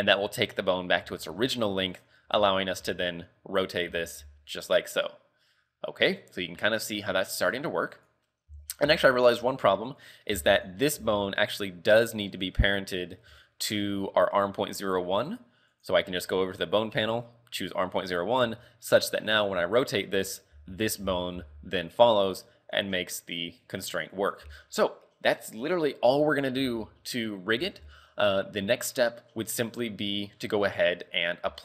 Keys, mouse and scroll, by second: 1.3 shift+middle click, 2.0 right click, 2.3 z, 2.5-2.9 scroll down 1, 2.9 r, 3.9 z, 4.3 r, 8.3 scroll down 3, 8.6-11.0 typing, 9.1 right click, 10.7 right click, 12.4 click, 13.3 Tab, 15.8 click, 18.5 Tab, 19.1 right click, 19.6 r, 20.6 z, 21.1 z, 21.4 r, 24.5 z, 24.7-25.0 scroll up 3, 26.7-27.6 scroll up 2, 27.6 z, 28.1 shift+middle click, 29.0 scroll down 3, 29.6-29.9 scroll up 4, 30.4 scroll down 2.